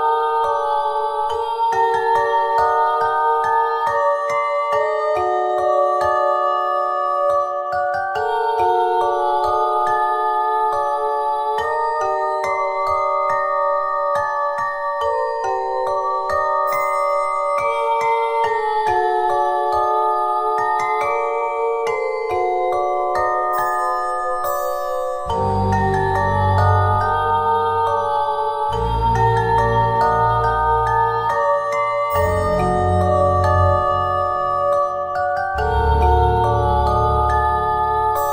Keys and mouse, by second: 1.9-3.8 middle drag, 7.1-10.2 drag, 12.9 click, 18.9 click, 20.5 e, 29.2 e, 36.8 e.